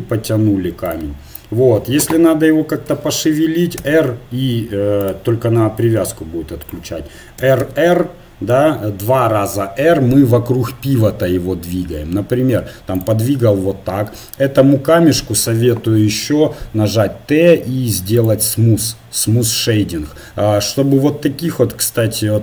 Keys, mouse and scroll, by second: 2.8 r, 6.6 right click, 7.4-10.6 drag, 7.4 r, 10.6-18.2 middle drag, 15.9 t, 18.2-20.0 drag.